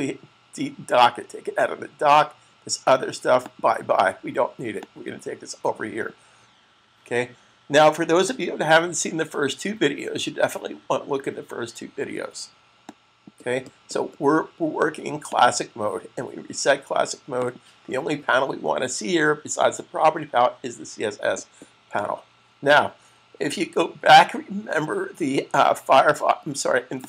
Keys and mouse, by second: 3.1 click, 12.7 click, 15.1 click, 21.8 click, 26.7 click.